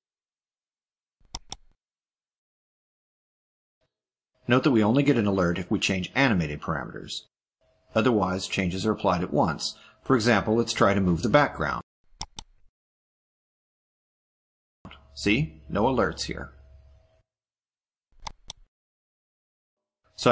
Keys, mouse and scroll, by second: 1.3 click, 12.1 click, 13.3 click, 18.1 click.